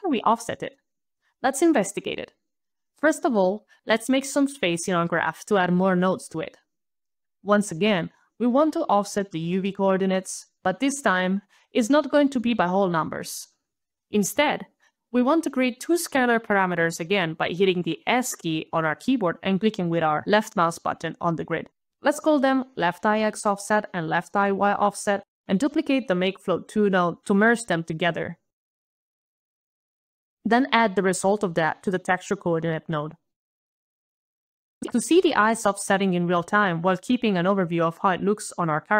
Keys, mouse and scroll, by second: 1.9 alt+right click, 2.9 alt+click, 2.9 alt+middle click, 2.9-3.3 alt+scroll down 1, 3.3 alt+right click, 7.1 alt+right click, 8.5 alt+right click, 15.1 alt+click, 19.0 alt+s, 19.8 alt+click, 22.2 alt+shift+l, 22.4 alt+shift+-, 22.5 alt+shift+e, 22.7 alt+shift+y, 22.7 alt+BackSpace, 22.9 alt+BackSpace, 22.9 alt+shift+-, 23.0 alt+shift+x, 23.1 alt+shift+-, 23.2 alt+shift+o, 23.2 alt+f, 23.3 alt+f, 23.3 alt+s, 23.3 alt+e, 23.3 alt+t, 23.5 ctrl+alt+a, 23.5 ctrl+alt+c, 23.5 alt+Return, 23.7 alt+click, 23.8 alt+s, 24.0 ctrl+alt+v, 24.2 alt+click, 24.3 alt+BackSpace, 24.3 alt+shift+y, 24.3 alt+Return, 24.7 alt+click, 25.2 alt+click, 26.4 ctrl+alt+d, 27.2 alt+click, 28.3 alt+click, 29.2 alt+click, 30.6 alt+click, 31.1 alt+a, 31.3 alt+d, 31.4 alt+d, 32.1 alt+click, 32.6 alt+click, 33.6 alt+click, 34.0 alt+click, 34.6 alt+right click, 34.6 alt+click, 36.9 alt+click, 38.5 alt+click.